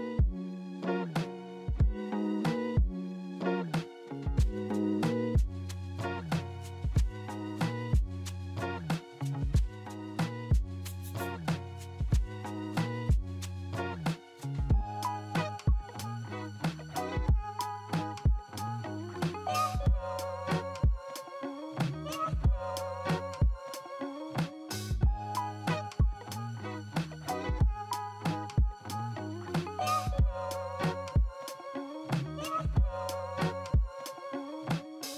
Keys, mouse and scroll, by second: 1.7 alt+middle click, 5.2 e, 9.0 w, 13.7-16.0 scroll down 3.